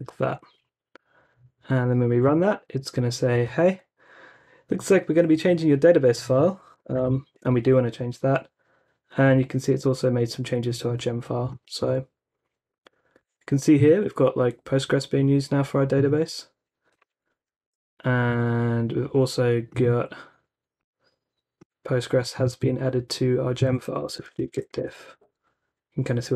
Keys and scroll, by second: 2.3 Return, 6.9 shift+y, 7.3 Return, 17.7 t, 23.7-25.2 typing.